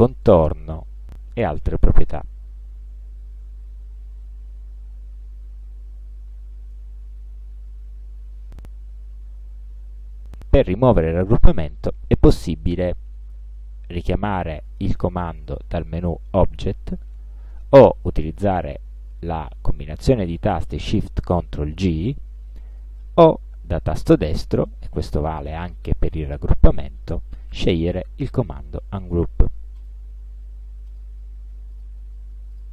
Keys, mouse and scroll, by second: 4.6 click, 9.5 click, 15.4 click, 22.8 click, 24.2 right click, 29.8 click, 30.9 click, 31.8 click, 32.6 click.